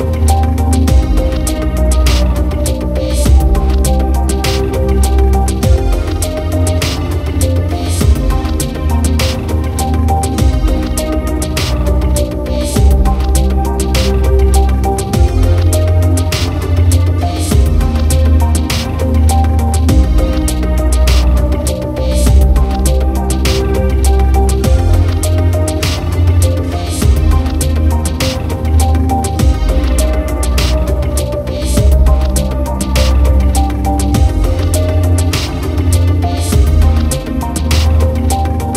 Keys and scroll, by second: 2.7 ctrl+d, 3.1 ctrl+=, 4.1 ctrl+space, 35.1 ctrl+z.